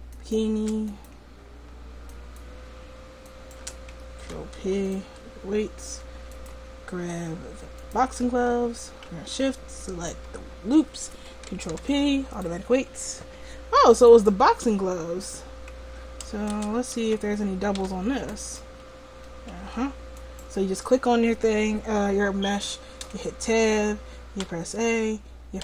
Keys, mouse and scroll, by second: 0.6-4.2 right drag, 4.2 ctrl+p, 7.1-11.8 right drag, 11.8 ctrl+p, 16.6 Tab, 17.1 a, 17.8 w, 19.6 Tab, 23.1 Tab, 24.5 a.